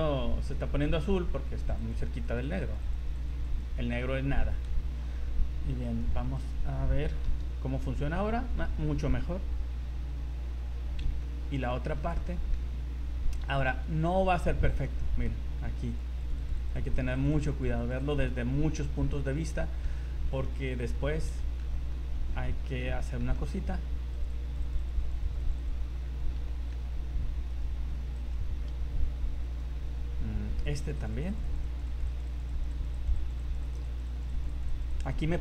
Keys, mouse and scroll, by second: 0.7 scroll up 1, 0.8 click, 1.0 click, 1.7 click, 1.9 click, 2.1 click, 2.2 click, 2.5 click, 2.6 click, 2.9 click, 3.1 click, 3.5 click, 4.1-4.6 scroll down 6, 5.9 right click, 6.4 right click, 7.2 r, 11.2 shift+middle click, 11.7 shift+middle click, 12.3 shift+middle click, 12.7-13.3 scroll up 3, 13.5 z, 13.9 middle click, 14.8 middle click, 15.3-15.8 scroll up 2, 15.9 click, 16.2-16.7 click, 16.5 click, 16.6 click, 16.9 click, 17.2 click, 17.3 click, 17.5 click, 17.8 click, 18.0 click, 18.2 scroll down 3, 18.5 middle click, 19.3 shift+middle click, 19.7 middle click, 20.0 shift+middle click, 20.4 middle click, 21.0 scroll up 2, 21.4 shift+middle click, 21.7 middle click, 22.1-22.4 scroll up 2, 22.9 middle click, 23.3 shift+middle click, 23.7 scroll up 2, 24.1 click, 24.4 click, 24.6 click, 24.9 click, 25.1 click, 25.2 click, 25.5 click, 25.6 click, 25.8 scroll down 4, 26.0 middle click, 26.5 middle click, 27.5 right click, 28.2 right click, 28.6 scroll down 2, 29.5 right click, 30.0-30.4 scroll up 4, 30.6-31.3 click, 30.8 click, 31.0 click, 31.5 click, 31.7 click, 31.9 click, 32.1 click, 32.3 click, 32.5 click, 32.7 click, 33.1 click, 33.3 click, 33.5 click, 33.7 click, 33.9 click, 34.1 click, 34.3 click, 34.5 click, 34.7 click, 34.9 click, 35.1 click, 35.3 z.